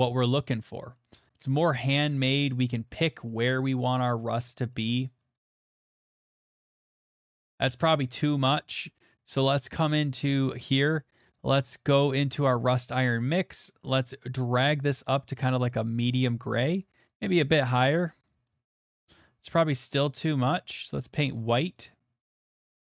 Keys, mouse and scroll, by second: 0.0 click, 0.4 click, 0.9 middle click, 1.2 middle click, 1.7 click, 2.2 click, 2.8 click, 3.3 middle click, 3.6 shift+middle click, 5.0 middle click, 5.4 middle click, 5.9 middle click, 6.2 click, 6.4 middle click, 7.5 click, 7.9 middle click, 8.2 ctrl+z, 8.5 ctrl+z, 10.0 click, 12.3 click, 12.7 middle click, 12.7 middle click, 12.7 middle click, 12.8 middle click, 13.5 middle click, 14.7 right click, 15.3 right click, 15.7 right click, 17.2 click, 17.9 click, 18.4 click, 18.6 click, 18.8 click, 20.8 click, 21.4 click, 22.2 click, 22.4 click, 22.5 click.